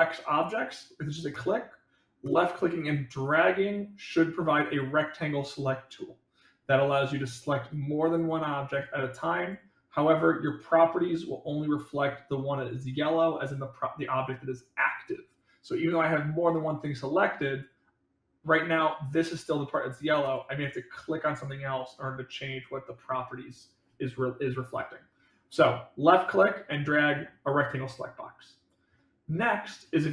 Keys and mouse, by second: 2.7-6.8 drag, 7.7 click, 9.0 click, 15.8 drag, 17.2 click, 21.4 click, 26.1 click.